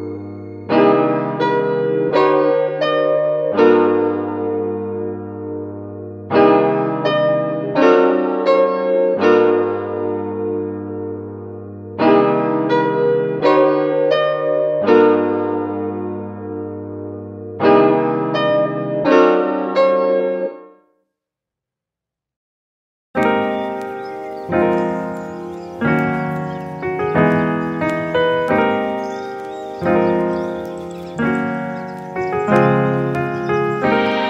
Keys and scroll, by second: 23.6 super+s, 24.0 Right, 24.3 BackSpace, 24.4 2, 24.4 Return.